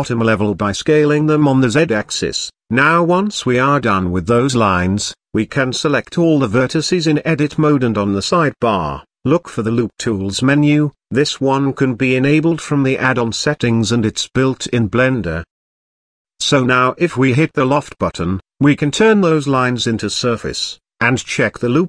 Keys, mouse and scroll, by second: 0.4 KP_1, 1.1 g, 3.1 scroll down 2, 3.3 middle click, 4.3-4.7 scroll up 1, 4.7 Tab, 5.3-5.6 middle drag, 5.6 scroll up 1, 5.8 Tab, 5.9 a, 6.5 shift+middle click, 6.7-7.3 shift+scroll up 1, 7.3 n, 8.2 click, 9.3-12.8 drag, 20.4-21.1 drag, 21.1 z.